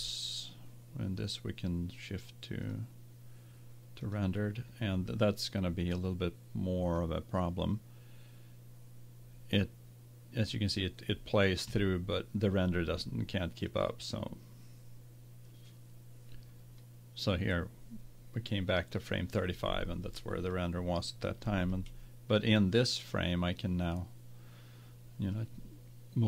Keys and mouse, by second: 2.8-4.6 drag, 13.9-15.9 drag, 21.9-23.2 middle drag, 24.0-25.4 middle drag.